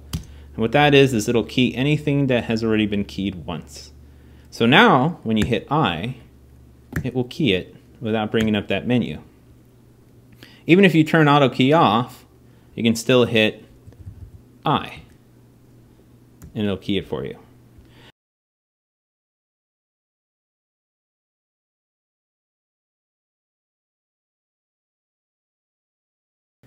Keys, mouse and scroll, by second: 5.1 i, 5.9-8.1 drag, 6.7 i, 8.1 i, 13.6-13.9 Left, 16.2 i, 18.5-19.1 Left, 19.3 Right, 19.5 Right, 19.8 Right, 20.0 Right, 20.2 Right, 20.7 Left, 20.9 Left, 21.0 Left, 21.3 Left, 21.6 Right, 22.6 Left, 22.8 Left, 23.0 Left, 23.8 Down, 24.3-25.3 Up.